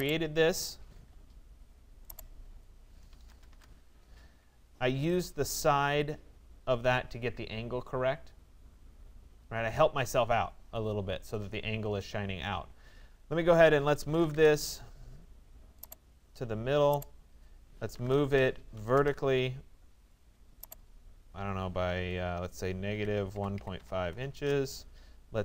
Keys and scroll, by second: 2.9 Return, 14.0 Return, 23.6 Delete, 23.8 5, 24.4 Return.